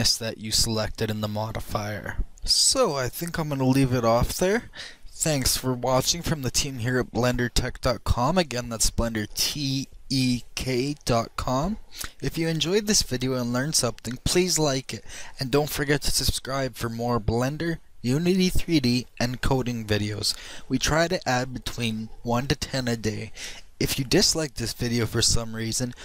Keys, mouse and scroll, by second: 1.9-2.4 middle drag.